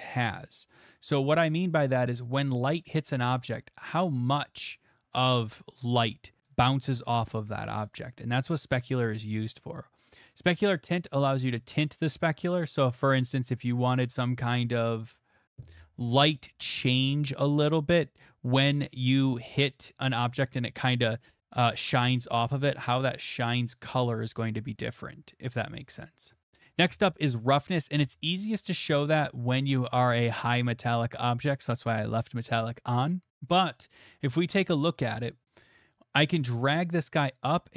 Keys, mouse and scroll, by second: 0.5 click, 2.6 middle click, 4.7 right click, 6.4 click, 11.4 click, 12.8-15.5 drag, 30.4-32.4 drag, 32.4-34.6 middle drag.